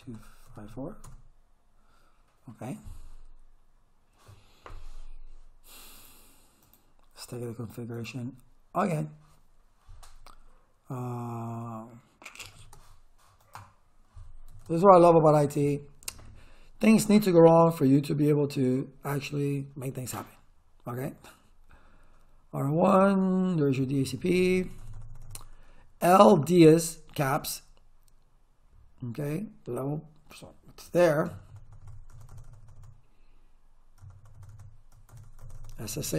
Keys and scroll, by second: 0.0-1.2 typing, 12.2-13.0 typing, 14.3-15.9 typing, 23.8 Return, 31.3 Return, 34.0 Return.